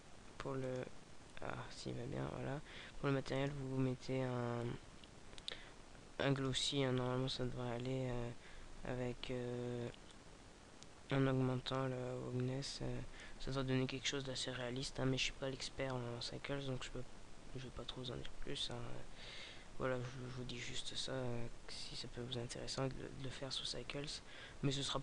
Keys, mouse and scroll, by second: 1.3 click, 4.0 click, 10.7 click.